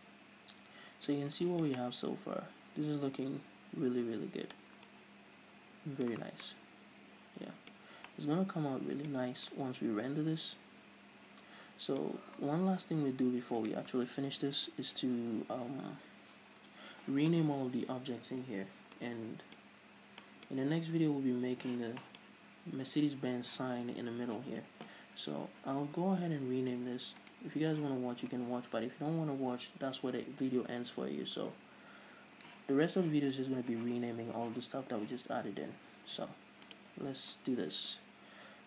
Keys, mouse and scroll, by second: 1.7 scroll up 2, 6.7 scroll down 2, 8.3 scroll up 2, 9.7-10.0 scroll up 2, 13.7-17.6 scroll up 2, 19.2 scroll down 2, 20.4-20.8 scroll up 2, 22.8-23.8 scroll up 2, 23.8-25.5 scroll up 1, 25.5-26.3 scroll up 1, 26.3-26.8 scroll down 2, 26.8-27.5 scroll up 2, 27.5-27.9 scroll up 1, 27.9 right click, 32.4-33.1 scroll up 2, 33.1-34.8 scroll up 1, 34.8-35.3 scroll down 1, 35.3-37.2 scroll up 1.